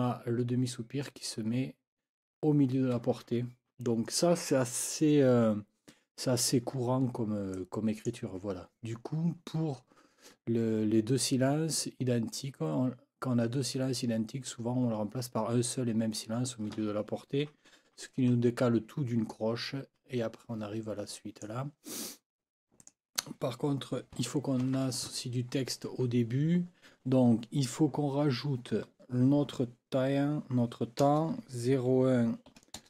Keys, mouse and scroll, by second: 7.5 click, 21.1 click, 22.8 click, 24.6 ctrl+t, 31.0 KP_0, 31.7 KP_1, 32.8 KP_0.